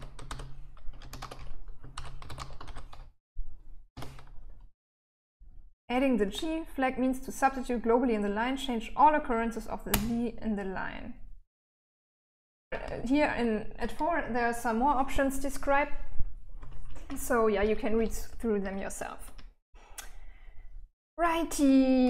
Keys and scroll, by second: 0.0-3.1 typing, 9.1 Return, 12.7 typing, 15.8-22.0 typing.